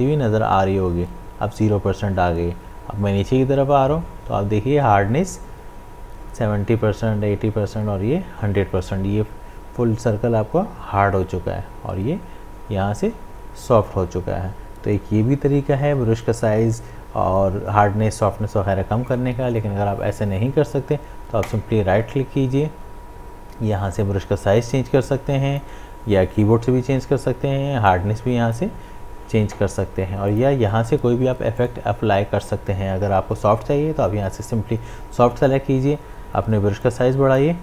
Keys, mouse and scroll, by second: 21.5 right click, 25.1-27.9 drag, 27.9-30.3 drag, 36.8-37.6 drag.